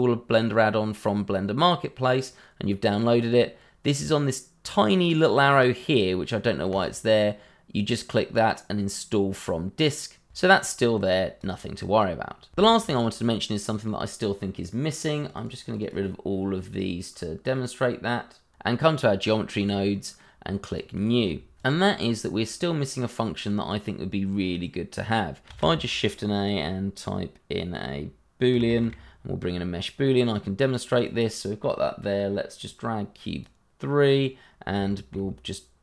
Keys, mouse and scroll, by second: 6.7 click, 10.3-10.9 scroll up 1, 10.9 scroll down 1, 11.6 scroll up 1, 12.8 click, 15.1 click, 15.3 double click, 18.5 click, 19.9 middle click, 20.6 click, 21.6 a, 21.9 ., 22.7 click, 23.0 scroll down 1, 23.2 middle click, 23.9 click, 25.5 shift+a, 28.5 b, 28.7 o, 30.2 click, 34.1 scroll down 1, 34.8 shift+middle click, 34.9 middle click, 35.0 shift+middle click.